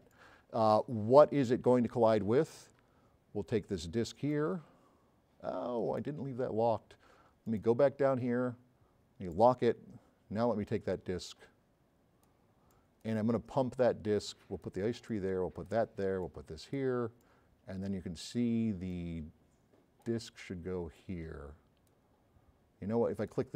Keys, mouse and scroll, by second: 4.3-5.9 drag, 9.3 click, 10.7 click, 11.7 click, 12.7 drag, 21.6 click.